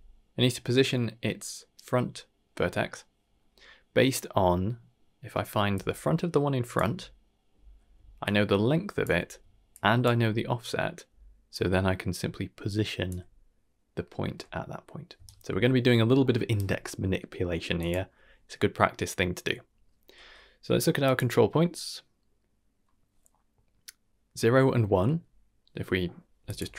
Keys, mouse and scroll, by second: 5.7 d, 5.7-6.7 drag, 6.7 d, 6.8 d, 8.2-9.0 drag, 9.0 d, 9.1 d, 9.7 click, 10.0 d, 11.5-13.1 drag, 13.0 d, 13.1 d, 15.2-16.5 right drag, 16.5 d, 16.8 middle click, 17.4 middle click, 17.7 click, 21.0 click, 26.4 click.